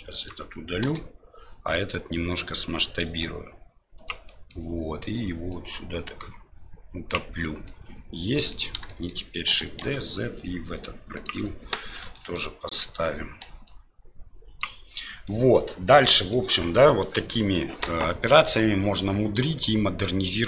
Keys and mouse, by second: 0.2 right click, 0.8 Delete, 2.3 right click, 3.0 s, 4.3 middle click, 5.6-7.1 drag, 7.8-8.7 middle drag, 9.0 shift+middle click, 9.5 shift+d, 12.1 shift+middle click, 13.7-14.8 drag, 15.3-16.3 middle drag, 18.5-20.4 middle drag.